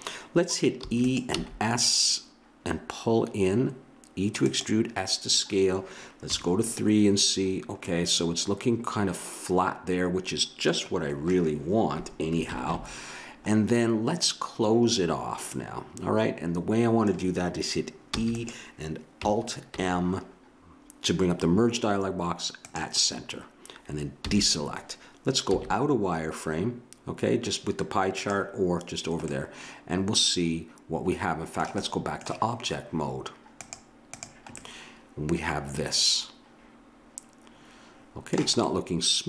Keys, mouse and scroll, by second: 0.8 e, 1.3 s, 6.3 KP_3, 12.5 ctrl+KP_1, 15.5 middle click, 18.1 e, 19.7 alt+m, 24.2 a, 25.5 z, 29.3-31.1 middle drag, 31.9-33.6 middle drag, 33.7-35.6 drag, 34.6 middle click, 35.6 middle click, 38.6-39.2 middle drag.